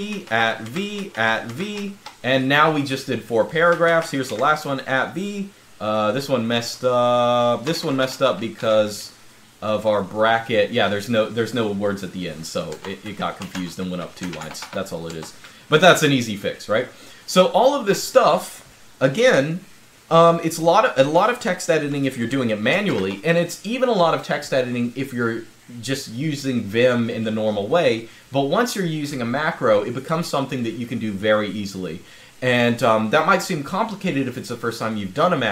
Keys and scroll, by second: 0.0-1.8 typing, 3.5-4.0 typing, 7.2-8.3 typing, 12.6 Escape, 12.8-15.0 typing, 15.0 Escape, 17.7-21.7 typing, 22.6 super+Scroll_Lock.